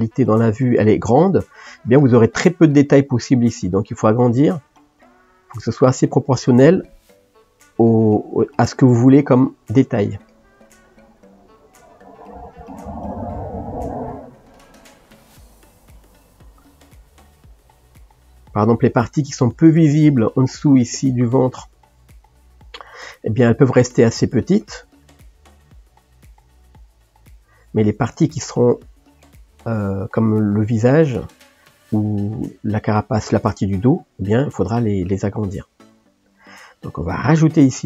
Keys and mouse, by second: 4.2 g, 6.9 click, 7.8 g, 8.9 click, 11.6 g, 14.2 click, 14.8 click, 15.3 g, 16.4 click, 17.2 g, 19.0-25.1 middle drag, 25.1 click, 25.5 g, 28.7-35.1 middle drag, 35.1 click.